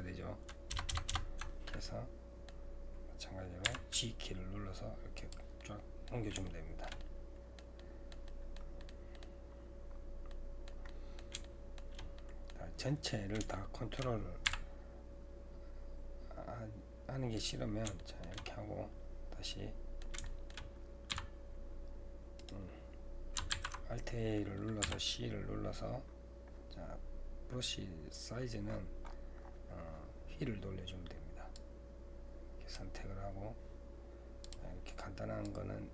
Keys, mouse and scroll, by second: 0.7 ctrl+KP_Add, 0.9 ctrl+KP_Add, 1.8-3.7 middle drag, 3.7 g, 5.6-8.6 middle drag, 8.6 scroll up 2, 8.8 middle click, 9.5-10.3 scroll up 2, 10.3-14.5 middle drag, 14.5 g, 18.0 shift+middle click, 18.5-19.5 scroll up 4, 19.5-21.1 middle drag, 21.1 c, 23.5 alt+a, 24.8 c.